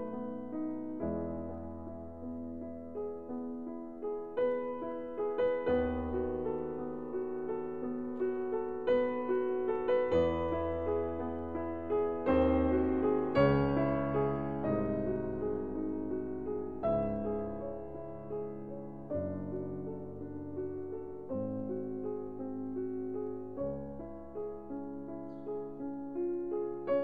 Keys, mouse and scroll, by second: 1.3 click, 3.9 click, 5.4 click, 6.5 click, 9.3 click, 12.6 click, 15.2 click, 20.1 ctrl+z, 21.7 click, 26.1 click.